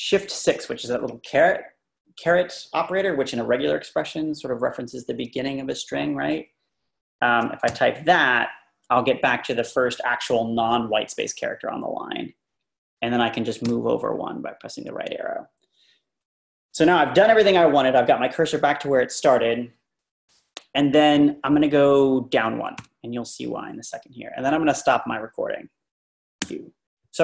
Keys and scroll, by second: 13.7 Tab, 22.8 Down, 26.4 q.